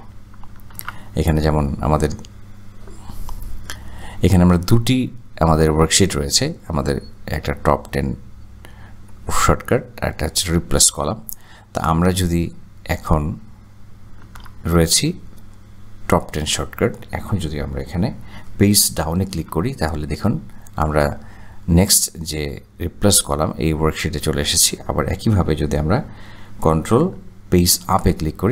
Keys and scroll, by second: 0.8 ctrl+1, 14.4 ctrl+1, 19.3 ctrl+Page_Down, 27.8 ctrl+Page_Up.